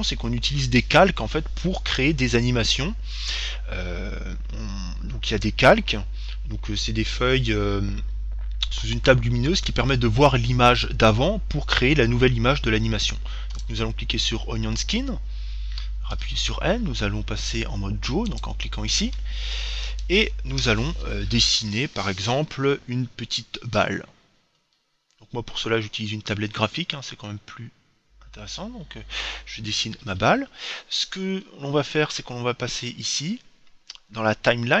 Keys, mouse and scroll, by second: 13.8-15.6 drag, 16.4 n, 18.6-20.2 drag.